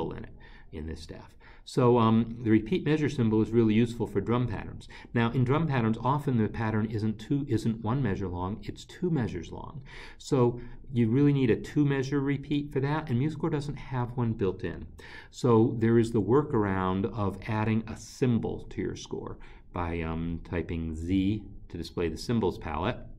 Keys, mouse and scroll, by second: 11.7 scroll, 16.5 click, 19.9 z.